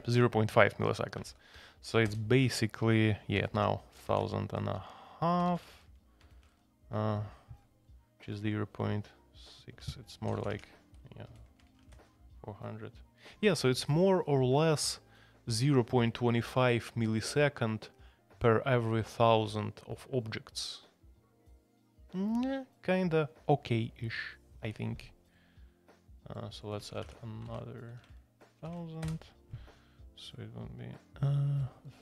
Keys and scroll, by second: 1.2 alt+p, 1.5 alt+p, 2.0 Return, 3.3 alt+p, 3.5 alt+p, 3.9-6.4 typing, 6.5 Return, 9.8 Escape, 10.0-12.3 typing, 13.6-14.4 typing, 26.8 Escape, 27.0 shift+a, 27.4 alt+p, 28.0 alt+p, 28.6 alt+p, 29.0 Return.